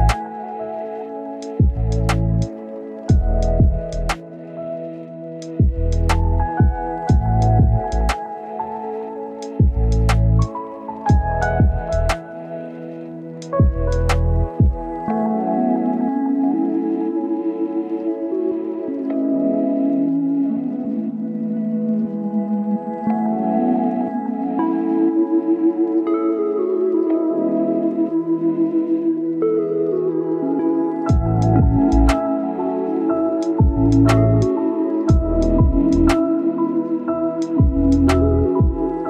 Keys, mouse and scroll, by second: 0.1-0.9 scroll up 1, 0.9 click, 3.2-3.7 scroll down 1, 3.7 scroll up 1, 4.4 click, 4.6 scroll down 1, 4.7 scroll up 1, 4.9 right click, 5.3 click, 5.6 scroll down 1, 5.7 scroll up 1, 5.9 click, 6.9-7.4 scroll down 1, 7.4-8.0 scroll up 1, 8.0 click, 8.4 right click, 9.0 click, 11.5 scroll up 1, 11.7 click, 17.7-18.6 scroll up 1, 18.6 scroll down 1, 18.8 scroll up 1, 19.4-26.4 drag, 26.6 scroll up 1, 26.8 click, 31.3 scroll down 1, 31.4-31.9 scroll up 1, 31.9 right click, 32.1-32.8 scroll up 1, 32.8-34.6 drag, 34.8 scroll down 1, 34.9-35.2 scroll up 1, 35.2 click, 37.0 scroll down 1, 37.1-37.5 scroll up 1, 37.5-39.0 drag.